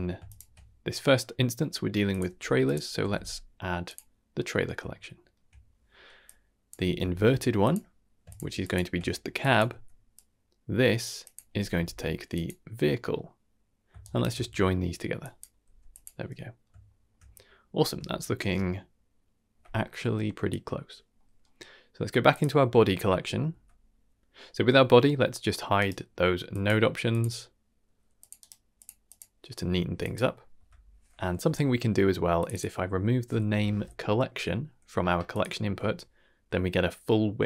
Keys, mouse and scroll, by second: 0.2 ctrl+shift+click, 2.0 click, 2.2 x, 2.6-3.9 drag, 4.6 scroll down 1, 4.9-5.3 shift+middle drag, 6.2 click, 6.7 shift+d, 8.2 ctrl+shift+click, 8.5 ctrl+shift+click, 9.3 drag, 9.6 x, 10.1-10.9 drag, 11.1 click, 13.0 middle click, 14.0 ctrl+shift+right drag, 14.5 middle click, 15.1 drag, 15.6 g, 16.3-19.5 middle drag, 17.7-18.1 scroll up 1, 21.1 middle click, 22.2 click, 23.5 Tab, 24.0 click, 25.7-27.2 right drag, 28.1 click, 28.3-29.1 right drag, 29.9 click, 30.5 Tab, 31.3 n, 32.3-33.7 drag, 35.2 click, 35.6 Tab.